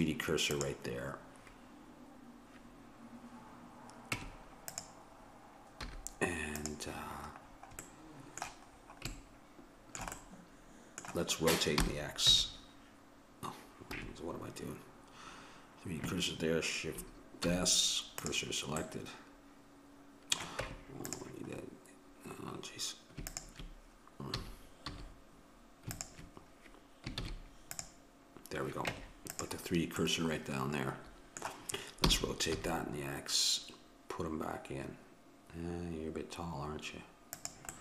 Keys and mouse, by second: 4.2 Tab, 5.8 z, 7.5 middle click, 8.7-11.8 middle drag, 11.8 r, 17.4 shift+s, 20.7 Tab, 23.3-25.2 drag, 24.4 a, 24.8 a, 26.0-27.7 drag, 27.2 shift+s, 28.9 Tab, 30.0-32.1 middle drag, 32.1 r.